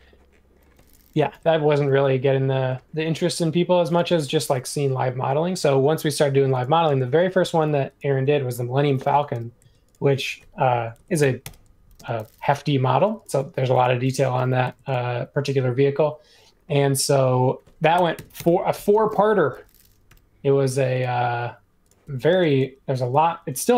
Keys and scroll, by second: 6.8 space, 9.3 m, 10.7-11.9 typing, 14.3 m, 17.7-18.6 typing, 20.0 typing, 22.0 Escape.